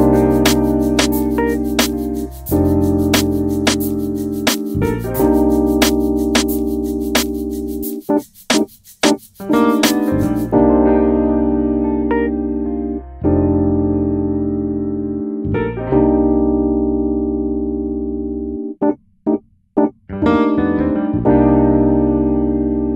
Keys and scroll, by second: 0.0-0.2 typing, 2.5-4.7 typing, 9.7-10.7 typing, 17.1-19.9 typing, 21.6-22.5 typing.